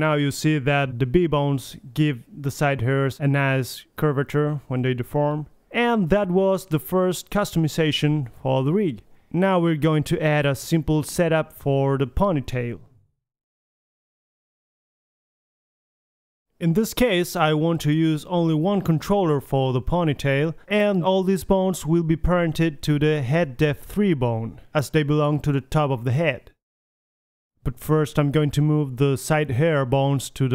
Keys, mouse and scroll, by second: 4.1 middle click, 4.4 KP_3, 4.6 a, 5.1-5.4 drag, 5.4 Right, 5.4 middle click, 5.7-6.0 middle drag, 5.7 r, 6.7-7.4 middle drag, 6.9-9.5 typing, 7.6-7.9 right drag, 7.9 middle drag, 10.8 r, 11.9 click, 11.9 a, 11.9 r, 13.2 alt+g, 13.2 alt+r, 13.2 a, 13.6 alt+s, 13.7 a, 13.7 KP_3, 15.1 KP_3, 15.6-16.6 drag, 16.7-18.0 middle drag, 18.0 click, 18.8 middle drag, 19.5-22.8 middle drag, 22.8 click, 25.4-26.4 drag, 26.5-26.9 middle drag, 27.3 Tab, 27.6 a, 27.8 Tab, 28.5 middle click, 29.7-30.5 drag, 30.4 m.